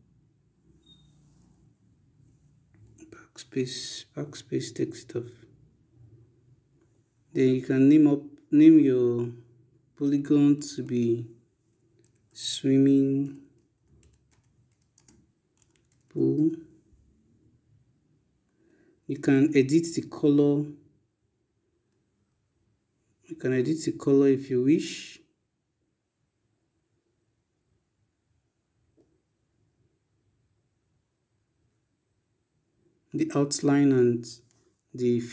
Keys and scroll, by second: 0.8 Escape, 2.1 BackSpace, 9.3 ctrl+BackSpace, 11.2-16.0 typing.